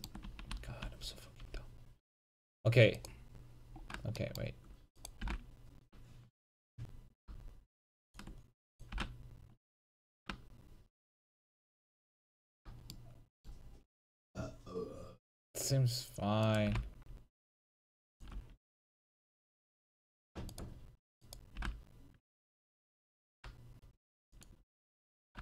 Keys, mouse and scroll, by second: 0.0 click, 0.3 a, 0.6 a, 0.9 a, 1.6 c, 3.1-4.3 drag, 5.3 g, 8.5 click, 8.8 right click, 9.0 g, 12.5 click, 12.5 a, 16.5 right click, 16.7 g, 18.4 a, 20.6-21.6 right drag, 21.8 g, 24.5-25.4 drag, 25.0 a.